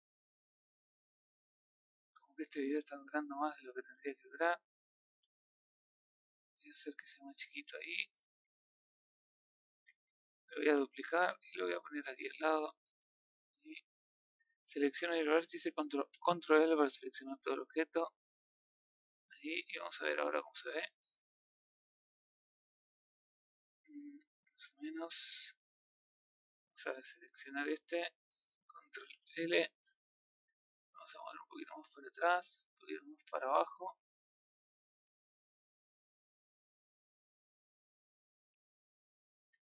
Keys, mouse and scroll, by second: 2.4 click, 3.8 g, 7.1 click, 14.5 click, 16.1 ctrl+l, 16.9 scroll up 1, 18.8-19.2 scroll down 10, 19.2 scroll up 1, 19.3 middle click, 19.9 z, 20.9-22.2 middle drag, 22.2 scroll up 1, 23.1-24.4 middle drag, 24.7-25.7 middle drag, 25.7 scroll up 1, 26.1 middle click, 26.6 click, 26.9 middle click, 27.8 click, 29.1 ctrl+l, 29.8-31.5 scroll up 1, 31.5 click, 34.0-34.3 scroll down 3, 34.3 middle click, 35.1-35.4 scroll down 1, 35.4 middle click, 36.4 scroll down 1, 36.6-38.4 middle drag, 38.4 z, 38.8 middle click, 38.9 Tab.